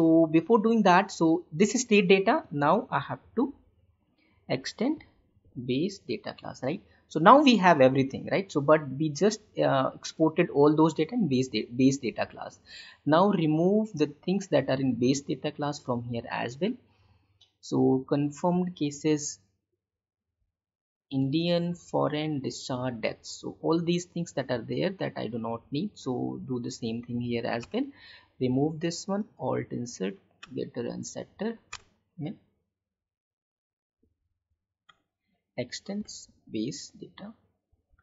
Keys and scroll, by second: 2.4 space, 21.0 ctrl+y, 28.9 alt+Insert, 29.6 Down.